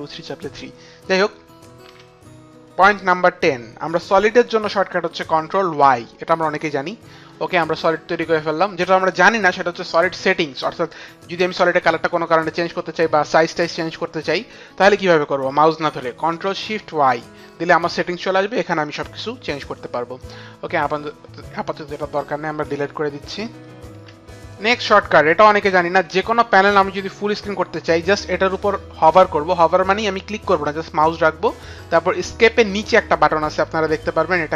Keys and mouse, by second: 5.6 ctrl+y, 8.4 ctrl+y, 8.4 click, 21.0 click, 22.8 Delete, 22.8 click.